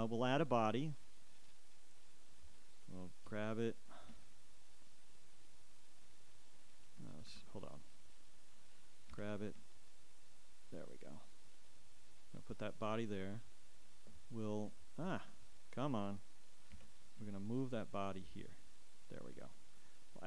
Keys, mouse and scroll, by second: 1.0 click, 2.2-3.4 drag, 3.4 g, 7.5 ctrl+Escape, 8.1-8.7 ctrl+scroll down 1, 9.3 g, 13.2-18.4 ctrl+drag, 18.4 Escape, 19.3 g.